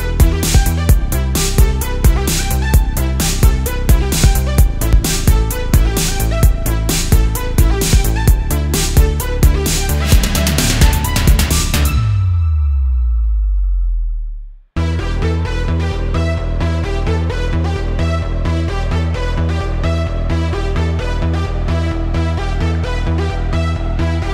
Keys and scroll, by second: 0.0-1.4 typing, 3.1 space, 5.8 space, 7.7-10.5 typing, 11.9 space, 12.5 space, 13.5 space, 14.0 space, 16.1 alt+super+space, 17.6 space, 18.6 space, 18.9 space, 20.3 space, 21.6 space, 22.6 alt+super+space, 23.5 super+z, 24.0 super+z.